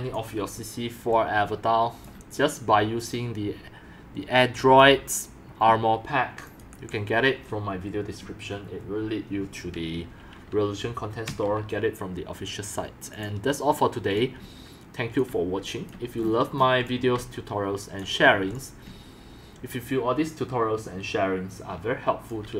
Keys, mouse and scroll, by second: 0.1 c, 1.1 x, 1.3 c, 3.0 click, 4.3 click, 6.4 click, 6.7 BackSpace, 13.1 click, 13.9-15.6 typing, 14.8 click, 15.6 click, 16.5 scroll down 1, 16.8 x, 17.1 c, 18.4 x, 18.8 c.